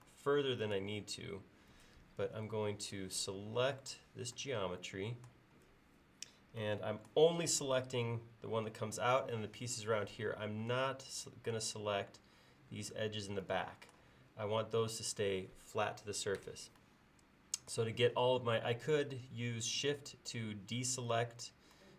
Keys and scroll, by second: 2.5 space.